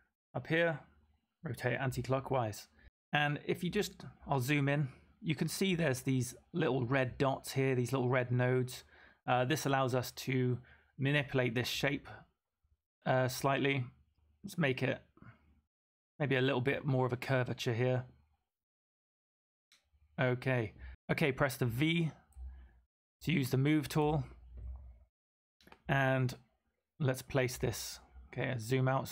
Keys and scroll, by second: 20.9 v, 22.3 v, 23.9 v.